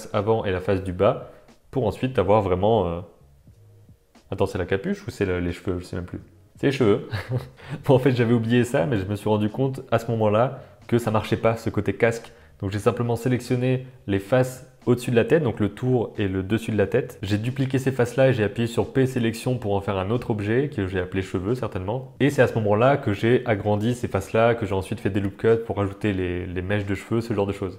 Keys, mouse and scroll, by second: 0.4 shift+middle click, 0.6 middle click, 0.9 shift+middle click, 1.2-2.8 typing, 4.3 middle click, 4.3 r, 4.5 shift+middle click, 5.1 click, 6.3 click, 7.6-15.2 middle drag, 7.6 Tab, 7.8 super+z, 15.8 x, 15.9 click, 16.0 middle click, 16.1 Tab, 16.4 click, 17.0 w, 17.0 click, 17.4 alt+shift+click, 17.8 shift+click, 18.0 middle click, 18.9 shift+d, 19.3 middle click, 19.7 p, 20.0 Tab, 20.3 Tab, 20.3 middle click, 20.4 Tab, 21.2 click, 21.7 middle click, 22.3 g, 22.5 g, 22.8 Tab, 22.9 middle click, 23.1-23.6 middle drag, 23.7 Tab, 23.8 Tab, 25.2 middle click, 26.4 click, 27.7 Tab.